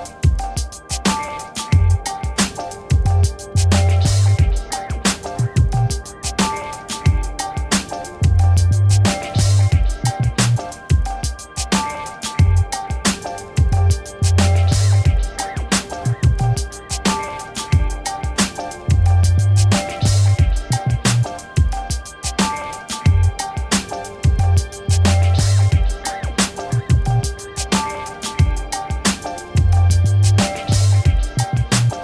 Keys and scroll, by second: 11.7 ctrl+alt+e, 14.7 ctrl+alt+e, 20.0-22.7 typing, 26.1 3, 27.4 Return.